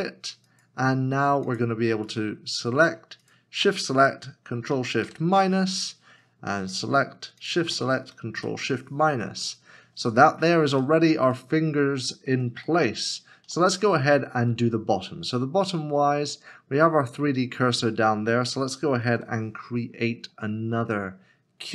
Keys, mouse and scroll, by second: 3.2 shift+click, 5.0 ctrl+shift+[, 5.1 ctrl+shift+KP_Subtract, 7.4 shift+click, 8.4 ctrl+shift+KP_Subtract, 10.8 ctrl+shift+[, 10.8 middle click, 11.4 shift+middle click, 12.8 middle click, 18.9 s, 19.1 shift+a.